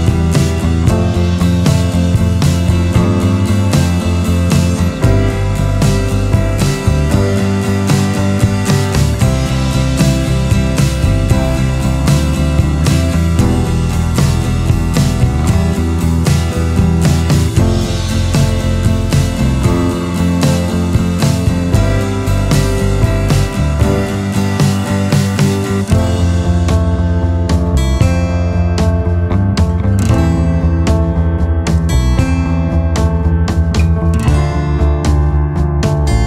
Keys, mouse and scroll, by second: 3.5 ctrl+z, 15.1 ctrl+z, 30.0-30.6 scroll.